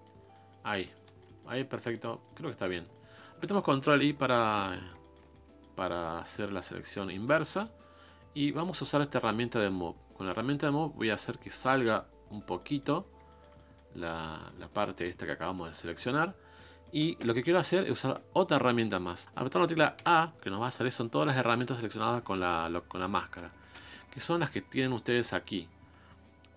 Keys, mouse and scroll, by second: 0.2 scroll down 2, 0.3-1.7 middle drag, 1.7 scroll up 1, 1.9-3.8 shift+middle drag, 3.8 ctrl+i, 4.1 scroll down 3, 4.4-8.8 middle drag, 8.8-10.7 drag, 12.6 middle click, 13.0 scroll up 1, 13.3 shift+middle click, 13.9-14.4 scroll up 1, 14.4-17.9 middle drag, 17.9-18.3 scroll down 3, 18.3 middle click, 19.2-20.0 scroll up 1, 20.0-21.0 scroll up 1, 21.0-21.7 scroll up 1, 21.7-22.9 scroll up 1, 22.9-23.9 scroll up 1, 23.9-26.5 scroll up 1.